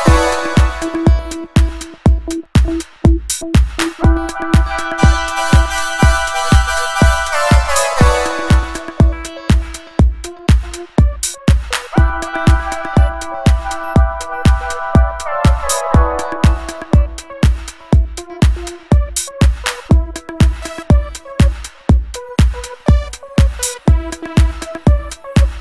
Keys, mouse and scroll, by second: 0.0 click, 1.2 click, 3.0 click, 5.9 click, 10.7 click, 12.2 click, 14.2-15.5 drag, 17.3 click, 18.6 click, 19.8 click, 20.5-21.4 typing, 24.5 click.